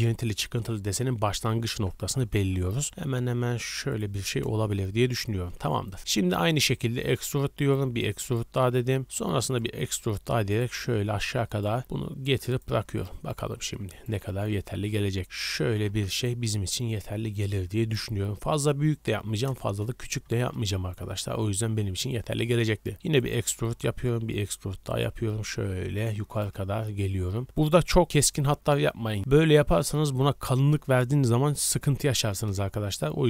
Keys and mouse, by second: 2.0 g, 4.5 KP_1, 7.0 e, 7.7 e, 8.7 g, 9.7 e, 11.8 g, 14.2 g, 15.6 g, 19.6 KP_1, 22.9 e, 23.7 e, 25.0 e, 26.8 g, 28.0 e, 31.9 ctrl+z.